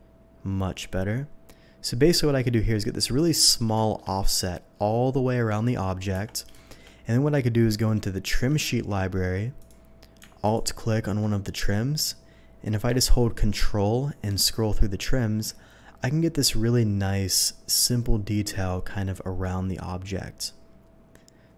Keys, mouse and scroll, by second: 3.0 click, 3.4 middle click, 3.8 middle click, 4.1 middle click, 4.7 middle click, 6.2 Tab, 6.5 middle click, 6.7 Tab, 8.2 v, 9.6 click, 10.4 click, 15.8-17.8 scroll up 1, 17.8-21.0 scroll up 1, 21.0 scroll down 1.